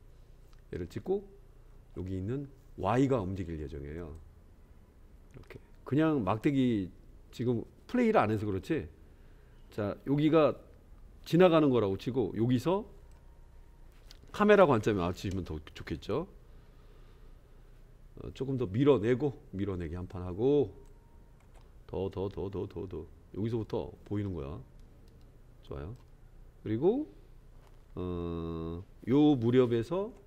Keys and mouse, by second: 4.3-13.2 drag, 15.2 KP_0, 21.7-26.0 drag.